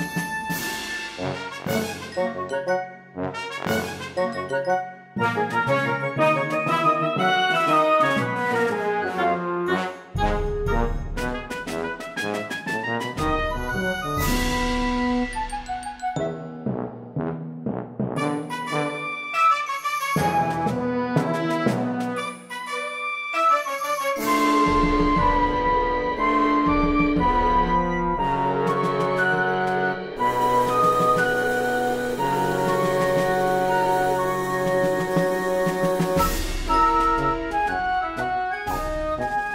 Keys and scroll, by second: 13.3 ctrl+z.